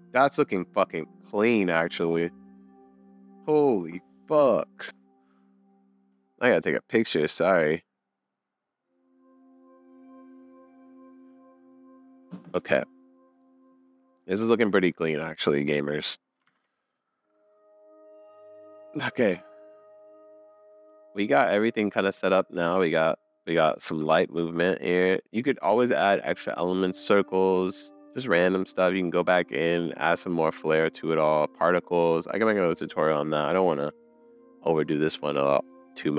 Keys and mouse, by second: 16.9 super+s, 20.7 middle click, 21.2 middle click, 21.9 z, 23.1 middle click, 23.5 click, 23.9 space, 34.9 space, 35.2 super+s.